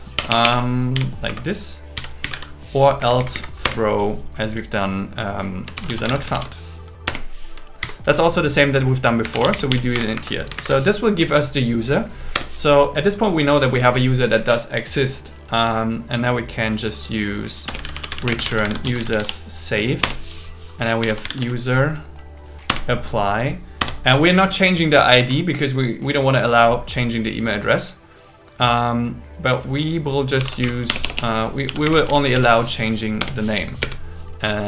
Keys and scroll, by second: 0.2 BackSpace, 1.3 Right, 3.6 Down, 3.8 Return, 5.9 shift+u, 6.3 shift+n, 7.1 Return, 7.8 shift+8, 9.9 Escape, 10.6 super+Right, 12.3 Return, 17.7 Return, 18.3 space, 20.0 Return, 22.7 Return, 23.8 Return, 25.2 Escape, 30.9 BackSpace, 33.2 Return, 33.8 space.